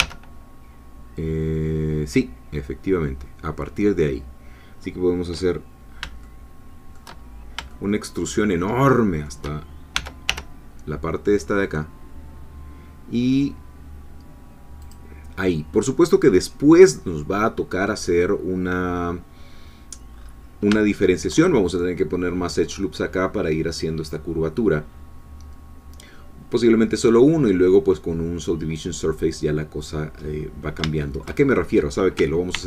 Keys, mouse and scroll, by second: 0.0 1, 5.7 scroll down 1, 6.2 shift+middle click, 7.3 shift+scroll down 1, 7.7-9.4 shift+middle drag, 9.9 e, 10.3 y, 14.8 click, 16.4-20.1 scroll down 2, 20.1-20.5 scroll up 2, 20.9 shift+middle click, 28.2-30.2 scroll down 2, 30.2-30.7 scroll up 2, 31.0 shift+middle click, 31.5 shift+scroll up 2, 32.5 ctrl+r.